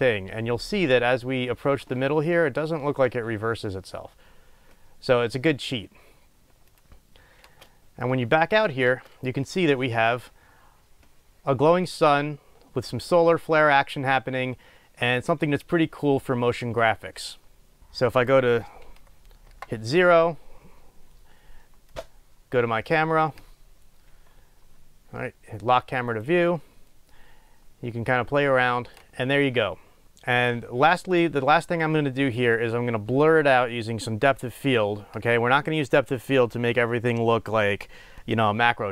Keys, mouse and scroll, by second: 7.6 space, 8.2-10.4 middle drag, 9.0 space, 12.3-12.8 middle drag, 17.8-19.5 scroll down 1, 19.5 KP_0, 22.1-26.3 drag, 25.1-25.5 scroll down 1, 27.6 scroll up 1, 28.3-30.6 middle drag, 29.1 space, 30.0 space, 30.6 click.